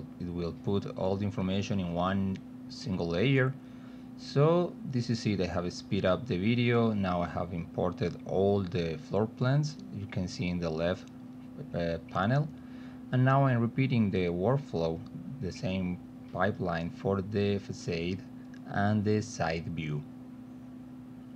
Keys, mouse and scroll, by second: 2.3 click, 2.8 click, 3.4 click, 4.1 click, 5.8 click, 6.7 click, 7.7 click, 8.3 click, 9.2 click, 10.8 click, 11.8 click, 13.3-15.7 typing, 16.1 click, 19.4 click, 19.7 click, 20.3 click, 21.0 click.